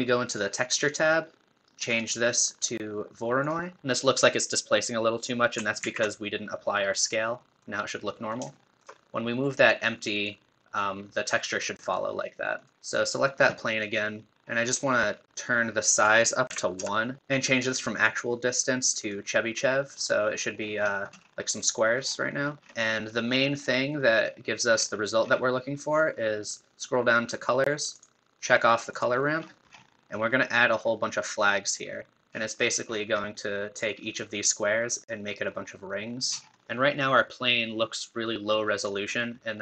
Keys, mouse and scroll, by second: 0.3-3.8 drag, 3.8 shift+middle click, 5.8 ctrl+a, 7.4-9.6 middle drag, 9.6 click, 10.2-12.7 drag, 14.3-15.9 scroll down 6, 15.9-17.2 drag, 17.2-17.7 scroll down 3, 18.0-19.7 drag, 19.7-20.6 middle drag, 20.6 scroll down 2, 20.8-21.9 scroll up 1, 21.9-23.6 scroll down 10, 23.6-24.7 drag, 24.7-25.4 scroll down 10, 26.0 scroll down 4, 28.0-28.9 drag, 28.9-29.4 drag, 29.4-29.9 scroll down 10, 32.3-33.4 scroll up 20, 36.2 scroll down 9, 36.5-38.8 shift+middle drag, 38.8-39.6 drag.